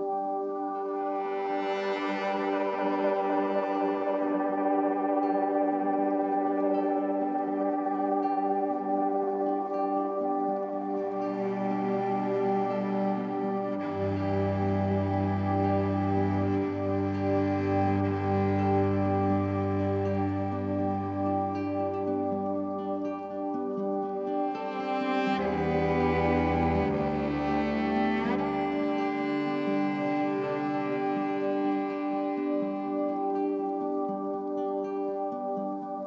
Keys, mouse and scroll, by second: 8.6-12.0 drag, 13.1 shift+click, 13.9 ctrl+g, 14.9 shift+click, 16.7-17.6 ctrl+scroll, 17.7 ctrl+scroll, 18.3 click, 22.3 Left, 24.6 click, 26.4 shift+click, 27.5 shift+Up, 27.7 shift+Up, 28.9 click, 30.3 Up, 30.5 Up, 30.8 typing, 32.6-35.0 drag, 35.6 Delete.